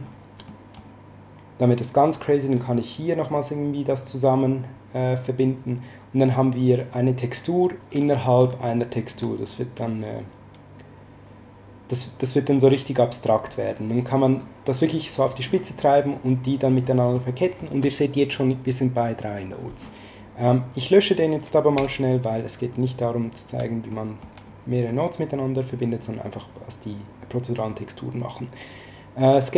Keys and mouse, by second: 0.4 middle click, 1.6 click, 13.9 click, 17.1 middle click, 20.8 click, 21.7 x, 23.9 middle click.